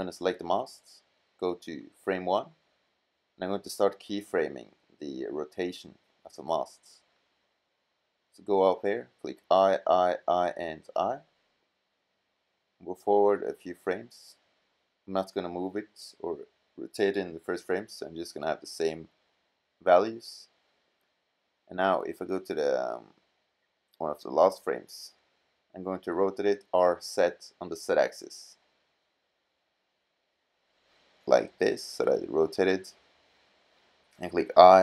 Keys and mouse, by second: 2.3 middle click, 6.1 middle click, 9.1 i, 9.5 i, 10.0 i, 10.6 i, 14.9 click, 17.2 i, 17.8 i, 18.3 i, 19.3 i, 21.2-22.1 drag, 25.9 r, 31.6-32.7 middle drag, 33.3-34.6 middle drag, 34.6 i.